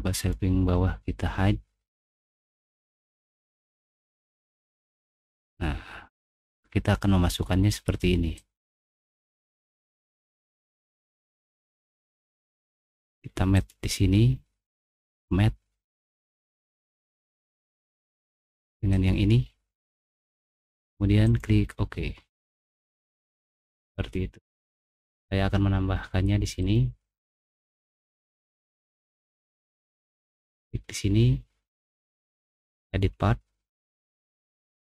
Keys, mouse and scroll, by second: 0.1 click, 2.2 click, 3.4 middle click, 4.6-6.1 drag, 6.4-8.0 middle drag, 8.3-9.6 drag, 10.1-11.5 middle drag, 12.0 middle click, 13.5 click, 15.1 click, 16.9-18.1 middle drag, 18.9 click, 20.3 click, 21.2 click, 22.5-24.5 middle drag, 26.6 click, 28.5 click, 30.4 click, 32.5 click.